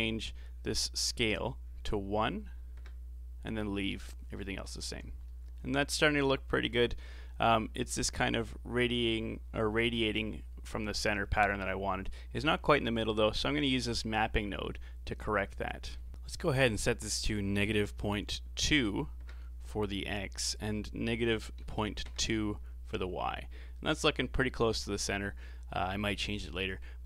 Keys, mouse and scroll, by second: 1.1-4.2 drag, 4.8-5.2 scroll down 1, 5.2-8.3 middle drag, 13.2 middle click, 13.6-14.1 scroll up 6, 14.1-15.2 middle drag, 15.2-19.9 drag, 20.5-23.6 drag, 25.8 scroll down 3, 26.5-27.0 middle drag.